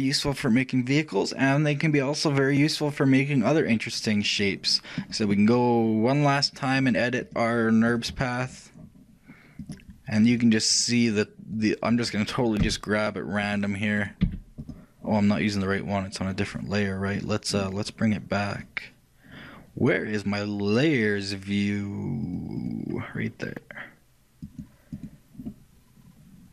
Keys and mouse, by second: 4.5 middle click, 5.2-6.6 right drag, 9.0 click, 9.3 right click, 11.5-13.5 drag, 14.4-19.0 drag, 14.4 g, 22.3-23.9 drag, 24.0 click, 24.5-26.5 drag.